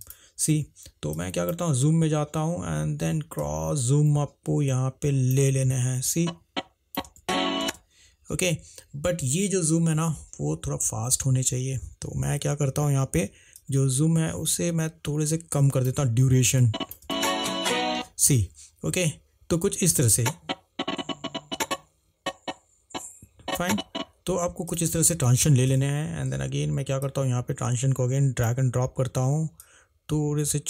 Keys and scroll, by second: 7.3 space, 12.8 =, 17.2 space.